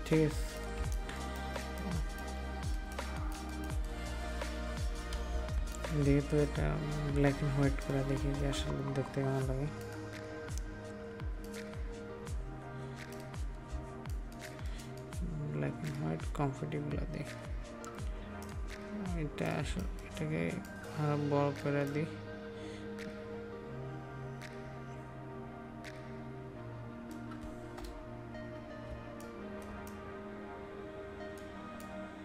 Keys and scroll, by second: 5.5 ctrl+space, 13.7 ctrl+space, 19.6 ctrl+space, 28.9 ctrl+space.